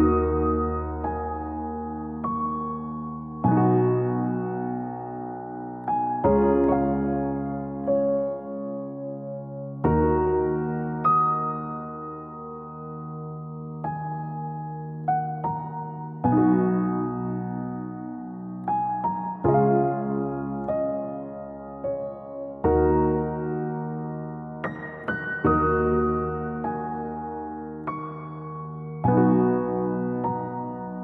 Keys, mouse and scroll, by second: 0.4 scroll up 1, 0.5-1.7 scroll down 4, 1.7 click, 2.0 click, 3.5 click, 4.1-4.7 scroll up 4, 4.7 click, 5.4-6.0 scroll, 6.6 click, 7.2-7.5 scroll down 2, 7.5 scroll up 1, 8.7 click, 9.7-10.9 scroll, 11.3 click, 11.7 Escape, 13.8 click, 14.6 click, 14.9-15.7 scroll up 7, 15.8 scroll down 1, 16.1 click, 16.3-17.5 scroll up 10, 19.5 click, 20.1 click, 20.5 click, 21.5 click, 22.4 click, 22.6 click, 22.8 click, 23.3 middle click, 24.2 click, 25.3 d, 26.8 click, 27.9 d, 29.0 click, 29.7 middle click, 29.7 middle click, 30.5 click, 30.7 click.